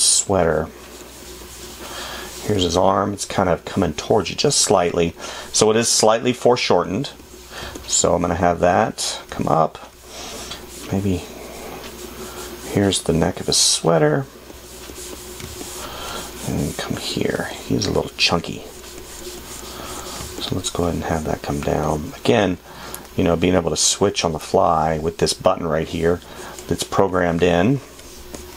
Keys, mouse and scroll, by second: 9.9 space, 15.8 space, 17.7 space.